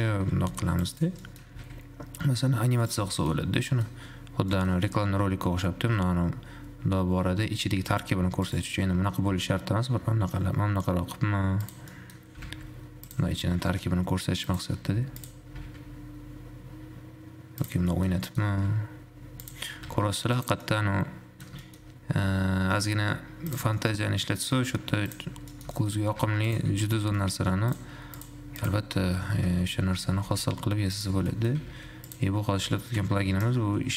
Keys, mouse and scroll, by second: 0.5 ctrl+KP_Subtract, 1.2 click, 1.4 middle drag, 1.7 g, 3.3-3.7 shift+middle drag, 3.7-4.2 scroll up 2, 4.2-5.2 middle drag, 5.2-6.2 shift+scroll up 2, 6.2 g, 9.4 r, 12.2 middle click, 12.7 g, 13.7 g, 15.2 s, 18.2 shift+middle click, 18.3 scroll down 2, 18.5 middle click, 18.7 s, 20.8-22.2 middle drag, 22.2 scroll up 2, 22.4 g, 24.0-24.9 shift+middle drag, 24.9 g, 25.7-26.4 shift+middle drag, 26.4 g, 26.9 Tab, 27.2 a, 27.4 middle click, 27.9 click, 28.2 Tab, 28.4 click, 28.8 click, 29.2 Tab, 29.9 a, 30.2 shift+d, 31.5 shift+middle click, 31.8 g, 32.8 r.